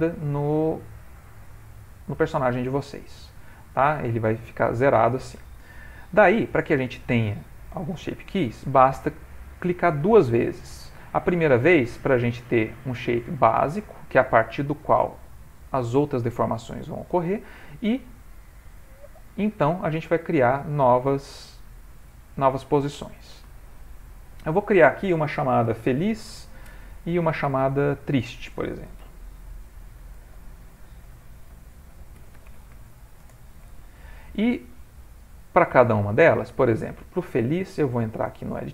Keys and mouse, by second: 0.2 click, 12.5 click, 18.3 click, 20.9 click, 24.4 click, 24.5 click, 27.9 click, 35.3 click, 37.1 ctrl+middle click, 38.6 Tab.